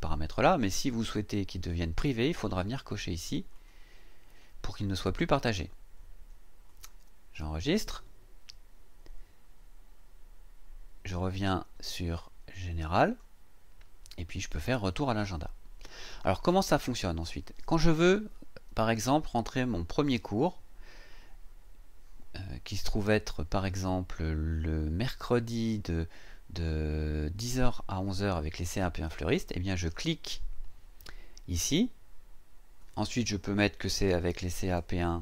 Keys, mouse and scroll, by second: 3.5 click, 6.6 click, 13.0 click, 14.5 click, 25.0-26.1 scroll down 2, 29.8 click, 33.8-35.2 typing.